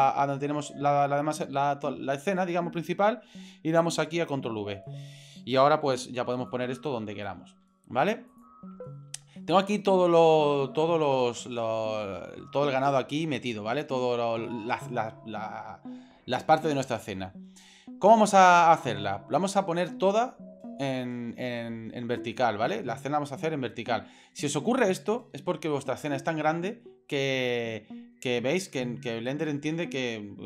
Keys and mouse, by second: 4.4 ctrl+v, 5.8 g, 6.8 g, 7.6 g, 9.4-12.5 middle drag, 13.3-13.8 middle drag, 22.4-24.4 middle drag, 25.2-26.8 middle drag, 28.3-29.8 middle drag, 29.9 shift+c.